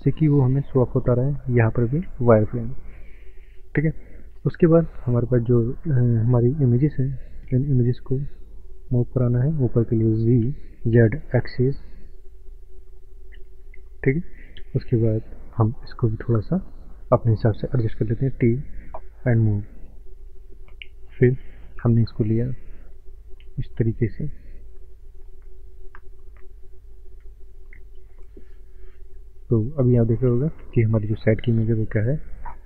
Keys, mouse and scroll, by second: 1.9 z, 3.7-4.3 scroll down 4, 4.2 scroll up 5, 4.7 click, 4.7 click, 5.1 scroll down 1, 6.1-6.4 scroll down 7, 6.3 middle click, 6.4 middle click, 6.7 click, 6.8 click, 7.0 scroll up 1, 7.7 click, 7.7 scroll up 1, 10.5 g, 13.3 click, 14.2 click, 15.3 shift+middle click, 15.3 shift+middle click, 18.3 t, 19.5 click, 19.6 click, 20.9 scroll up 1, 21.5 scroll up 3, 22.1 click, 28.9-29.5 scroll up 5, 29.5 shift+middle click, 29.5 shift+middle click, 31.7 click, 32.3 shift+middle click.